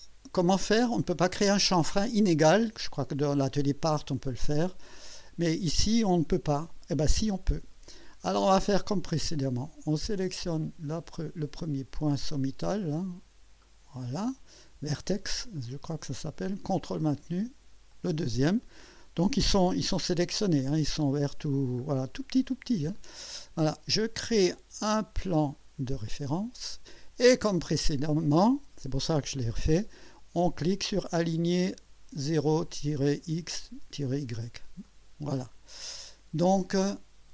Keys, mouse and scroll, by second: 8.3 scroll up 1, 8.8-9.5 right drag, 13.6 click, 14.4 scroll up 1, 15.1-15.8 right drag, 17.9 ctrl+click, 19.9 scroll up 2, 21.9 middle click, 22.2-22.7 alt+scroll down 5, 25.9 click, 34.8 click.